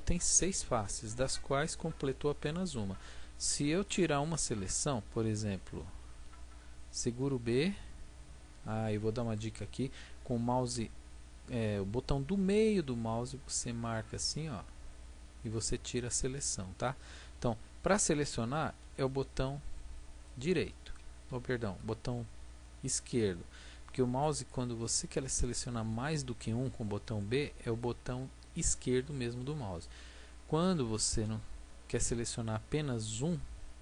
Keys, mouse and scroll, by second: 7.0 b, 18.7 b, 20.9-22.9 drag, 21.3 b, 24.7-26.7 middle drag, 27.0 b, 31.2 a, 33.1-33.8 right drag.